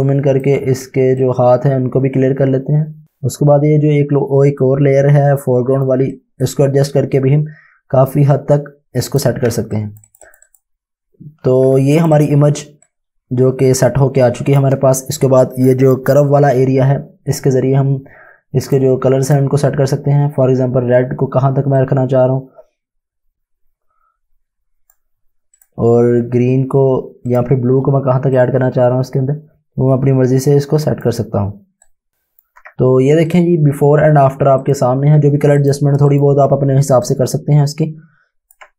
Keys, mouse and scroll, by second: 1.2-2.0 typing, 1.3 click, 9.4 space, 9.8 click, 10.5 click, 11.2-13.7 typing, 12.1 click, 12.9 click, 18.7 click, 21.8 click, 33.3 click, 36.7 space, 37.1 click.